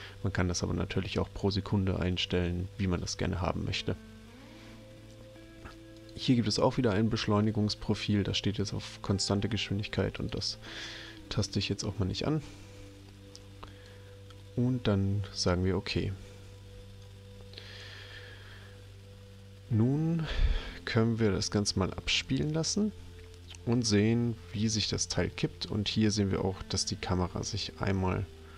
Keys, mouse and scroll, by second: 5.9 click, 10.2 click, 13.7 click, 17.0 click, 22.2 click, 28.1 middle click.